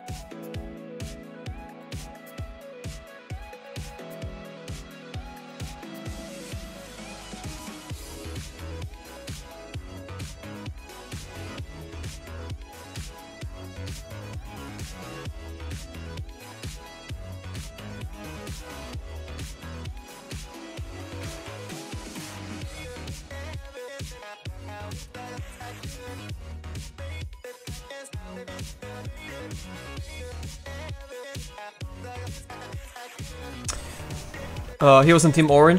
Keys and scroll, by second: 17.4 s, 20.0 s, 21.8 s.